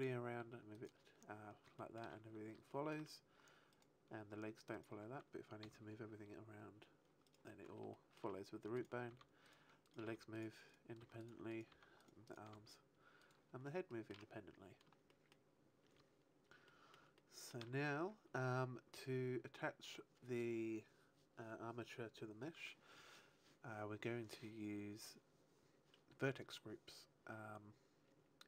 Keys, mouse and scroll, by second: 0.8 right click, 1.7 shift+middle click, 2.6 shift+middle click, 3.5 right click, 5.4 right click, 5.6 g, 7.5 right click, 7.9 shift+middle click, 8.7 right click, 9.0 r, 9.4 right click, 9.8 right click, 10.2 r, 10.6 right click, 10.9 r, 11.2 right click, 11.4 right click, 11.5 r, 12.2 right click, 12.5 r, 13.1 right click, 13.8 shift+middle click, 14.5-14.8 scroll down 1, 15.0 shift+middle click, 16.6 shift+middle click, 17.1 shift+middle click.